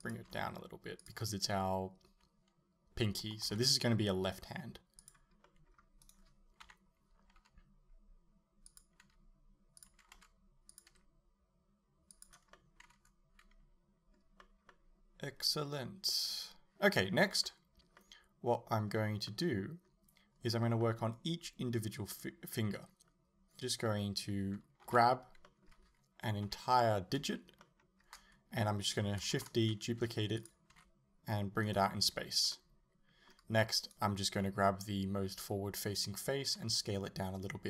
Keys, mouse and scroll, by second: 0.1 click, 0.3 r, 1.1 click, 3.5 s, 5.1 click, 5.5 middle click, 6.1 right click, 6.7 KP_7, 7.4 g, 8.8 click, 9.0 g, 9.9 click, 10.2 r, 10.8 click, 10.9 g, 12.3 click, 12.6-30.5 middle drag, 14.5 scroll up 2, 24.9 l, 26.5 KP_7, 29.4 shift+d, 30.5 click, 30.8 r, 31.8 right click, 32.6-33.8 middle drag, 33.8 right click, 36.5 s.